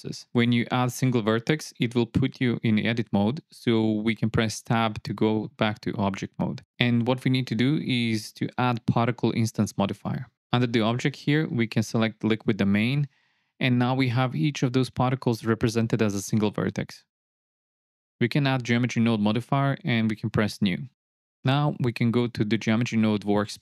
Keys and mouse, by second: 6.0 Tab, 8.4 click, 8.9-11.1 drag, 12.2-13.2 drag, 15.1 KP_0, 15.5 click, 15.5 space, 18.5-19.7 drag, 20.8 click.